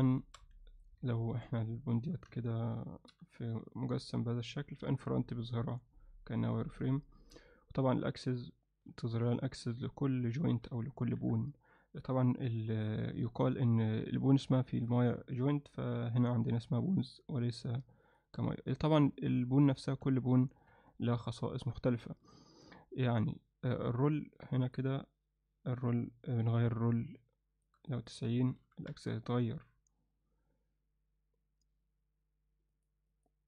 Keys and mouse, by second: 0.1 alt+shift+middle click, 0.7 ctrl+alt+middle click, 1.1 click, 1.8 click, 2.3 Tab, 3.1 g, 5.7 click, 6.8 click, 8.2 click, 9.1-10.7 alt+middle drag, 11.2 KP_1, 13.0 KP_3, 14.6-14.9 shift+middle drag, 18.1 click, 20.0 n, 20.7 Tab, 24.7 click, 25.9-27.7 drag, 27.8-29.2 drag, 32.8 click, 33.1 click.